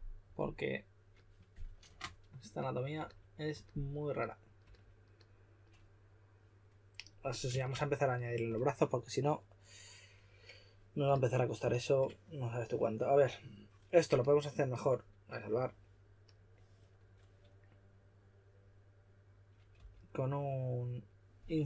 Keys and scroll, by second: 11.0 s, 19.7 b.